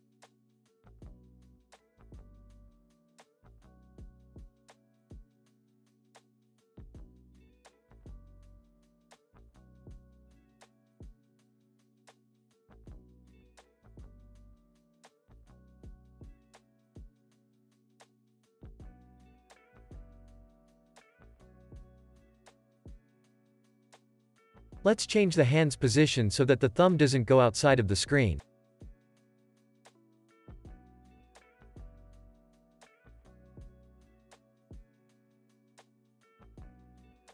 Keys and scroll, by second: 0.3 super+s, 1.4 space, 3.0 space, 3.2 super+s, 3.9 space, 5.3 space, 5.6 super+s, 16.5 =, 22.7 super+s, 24.8 p, 28.3 super+s, 36.4 space.